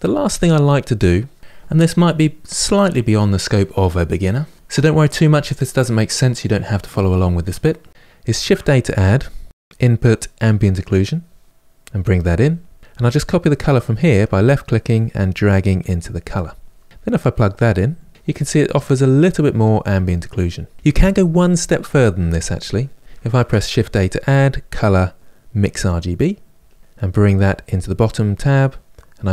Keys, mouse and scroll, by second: 16.8-18.1 drag, 18.1-21.8 middle drag, 21.8-26.8 drag, 27.4-29.3 drag.